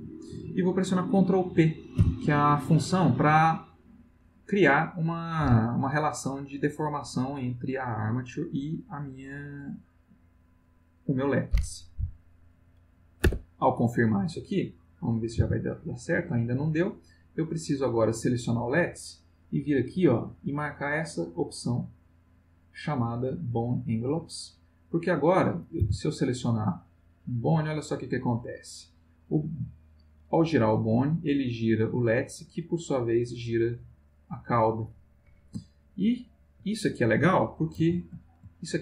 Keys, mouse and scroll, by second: 2.0 ctrl+p, 13.2 Return, 14.8 click, 15.3 r, 16.1 Escape, 17.3 click, 22.0 click, 24.0 click, 25.3 click, 25.8 r, 29.7 click, 31.6 click, 36.0 ctrl+z, 37.8 alt+r, 38.5 ctrl+alt+middle click.